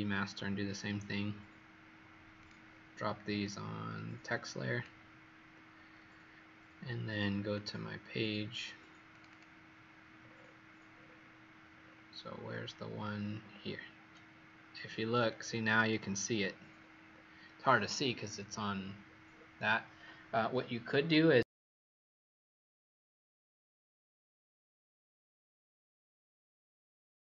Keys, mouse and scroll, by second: 0.3 click, 9.2 click, 10.1-12.6 scroll down 30, 13.1-13.5 scroll down 5, 14.3 alt+scroll.